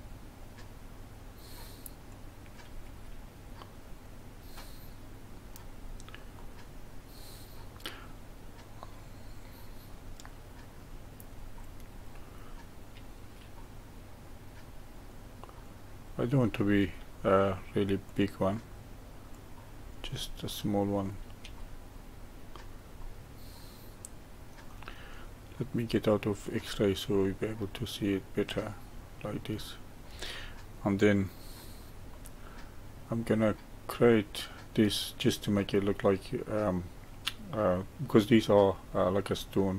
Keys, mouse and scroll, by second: 2.1-2.8 drag, 2.8 g, 4.6-5.7 middle drag, 5.7-6.3 scroll down 3, 6.3-9.3 middle drag, 10.7 drag, 11.9-12.9 scroll up 2, 12.9 g, 15.6 drag, 16.7 g, 19.3 drag, 20.2-21.4 middle drag, 21.4 g, 23.0-26.0 middle drag, 26.4 click, 27.1-30.1 middle drag, 32.1-35.1 middle drag.